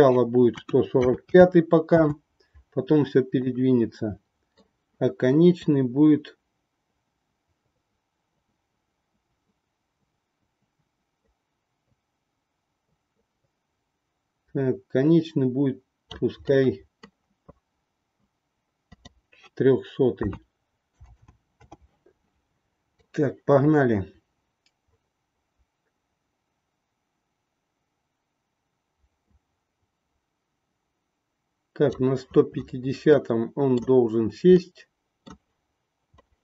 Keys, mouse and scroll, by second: 3.5-4.5 middle drag, 5.7-16.1 drag, 16.4 middle click, 18.9-21.9 drag, 21.0 KP_0, 23.0-31.9 drag, 33.0 middle click, 34.7 middle click, 36.2 middle click.